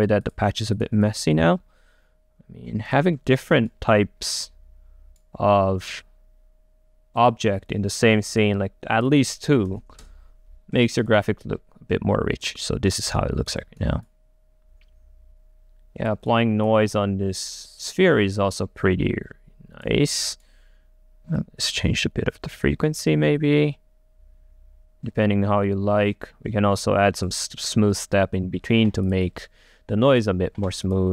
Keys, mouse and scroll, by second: 0.0-3.2 drag, 3.2 middle click, 3.8-7.1 right drag, 7.4 click, 8.4 click, 8.7 middle click, 9.2 click, 10.1 Return, 10.9 click, 12.7 right click, 12.7-13.3 scroll up 1, 13.3 click, 14.2 click, 20.3 right click.